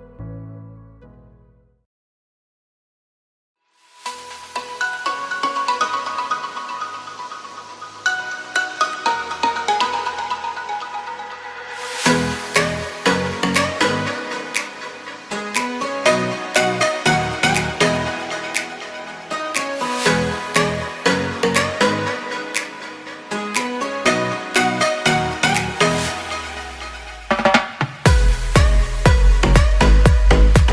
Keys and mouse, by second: 0.2 a, 0.5 middle click, 1.2 click, 1.4 ctrl+e, 2.1 a, 2.6 a, 2.9 u, 3.4 a, 4.9 shift+click, 5.8 click, 6.0 ctrl+e, 6.9 click, 7.4 ctrl+e, 8.0 a, 8.7 u, 10.0 3, 10.2 click, 10.9 ctrl+l, 11.4 h, 12.1 shift+middle click, 12.6 2, 12.9 middle click, 13.8 shift+middle click, 15.2-18.2 middle drag, 19.0-20.5 middle drag, 21.6 shift+middle click, 22.4-23.5 middle drag, 23.8 shift+middle click, 25.4 middle click, 26.6 shift+middle click, 27.1-28.8 middle drag.